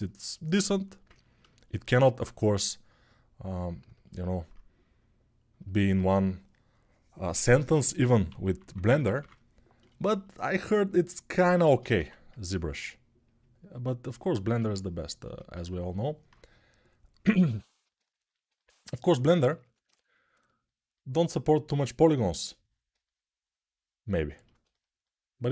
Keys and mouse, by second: 8.1-8.9 typing, 11.4 ctrl+z, 11.7 1, 15.6-25.5 ctrl+alt+drag.